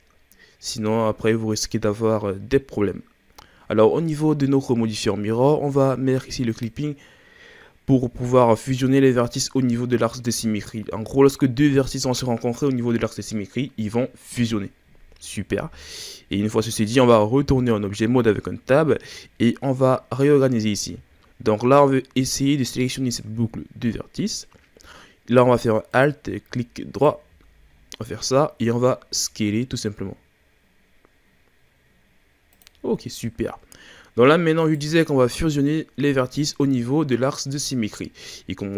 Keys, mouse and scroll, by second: 6.5 click, 8.6-11.8 scroll up 3, 14.7-16.1 scroll down 4, 16.1-17.4 ctrl+scroll up 1, 17.4 Tab, 18.6-19.0 scroll up 2, 25.9 right click, 26.9 alt+right click, 27.7-28.4 ctrl+scroll up 4, 28.6 s, 32.9-33.2 scroll down 2, 33.6-34.6 scroll up 3, 34.6 right click, 35.2 ctrl+scroll down 2, 37.5-37.9 scroll down 1, 37.9-38.7 shift+scroll up 4.